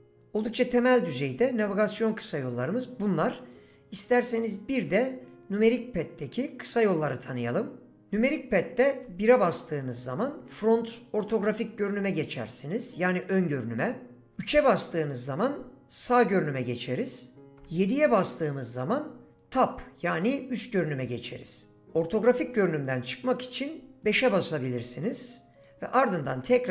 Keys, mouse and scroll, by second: 9.0 KP_1, 14.2 KP_3, 17.6 KP_7, 24.0 KP_5.